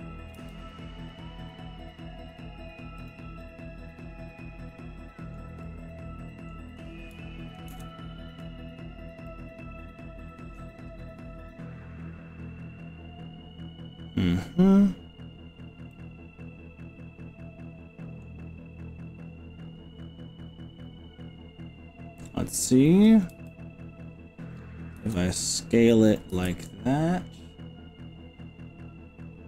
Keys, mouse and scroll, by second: 0.3 g, 3.1 click, 3.4-5.5 middle drag, 5.6 middle click, 7.9 ctrl+KP_Add, 9.3-10.5 middle drag, 15.9-18.3 middle drag, 23.3 s, 25.0 z, 26.3 y.